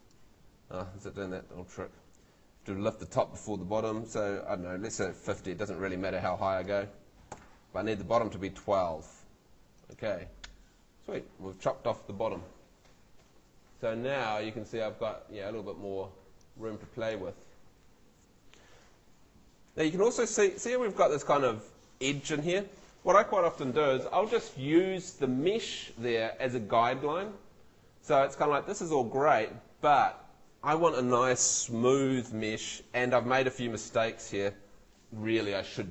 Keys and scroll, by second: 5.0 5, 5.4 0, 7.3 |, 8.4 2.